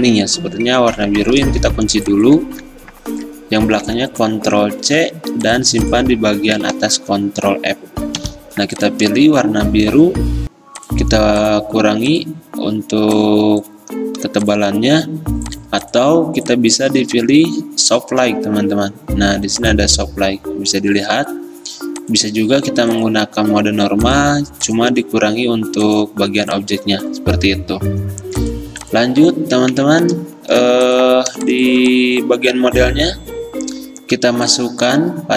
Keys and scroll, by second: 1.7 ctrl+2, 2.5 ctrl+z, 3.9 ctrl+c, 4.9 ctrl+alt+2, 7.1 ctrl+f, 11.7 i, 14.6 scroll, 29.9 ctrl+z, 30.7 v.